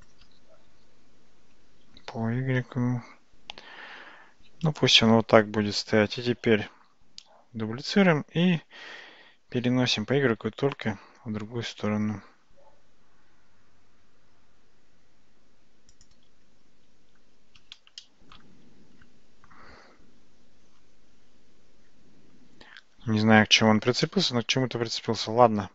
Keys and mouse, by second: 0.7 g, 6.9 shift+d, 9.7 g, 18.1-18.4 shift+middle drag, 24.1-25.7 shift+middle drag.